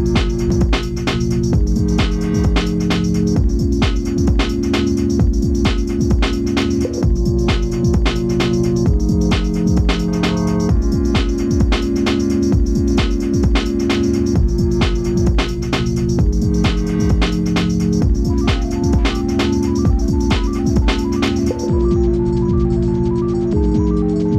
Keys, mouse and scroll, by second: 3.7 z, 4.1 click, 10.4 2, 10.8 click, 16.6 alt+shift+click.